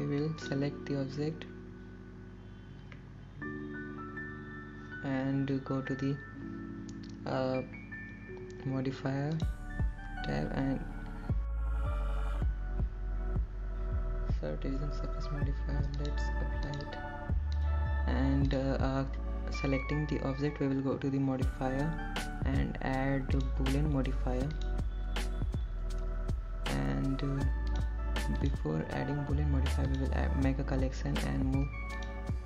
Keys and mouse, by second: 0.4-1.4 middle drag, 2.3 middle click, 17.6 Tab, 19.0-20.1 drag, 26.5-27.7 drag, 30.8 click, 31.5 click.